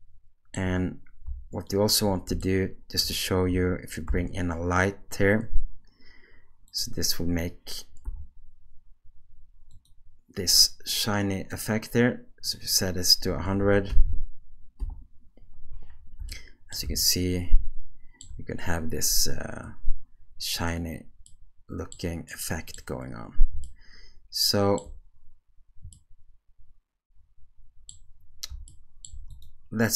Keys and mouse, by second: 1.7 shift+right click, 2.4-3.0 shift+middle drag, 4.0 shift+a, 8.1 g, 12.5-14.9 drag, 13.4 BackSpace, 14.0 0, 16.3-16.7 ctrl+middle drag, 17.0-18.2 shift+middle drag, 21.3-21.9 middle drag, 22.3 middle click, 23.6-24.8 shift+middle drag, 25.9-27.9 middle drag, 28.7 shift+middle click, 29.3 click.